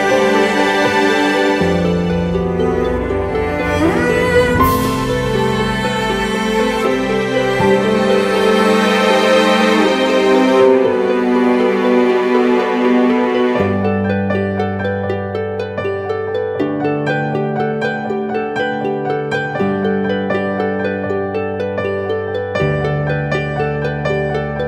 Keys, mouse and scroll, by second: 0.0-0.5 typing, 1.8 double click, 10.6 right click, 13.2-16.0 typing, 16.5 double click, 21.1 ctrl+-, 21.2 ctrl+-, 21.4 ctrl+-, 21.6 ctrl+-.